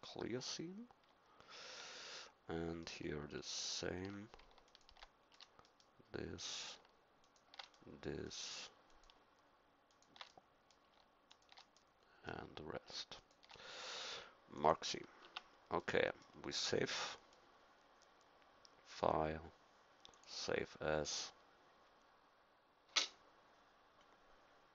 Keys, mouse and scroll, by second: 2.0 middle click, 6.0 middle click, 7.9-13.6 middle drag, 15.2 Tab, 15.8 middle click, 18.9 click.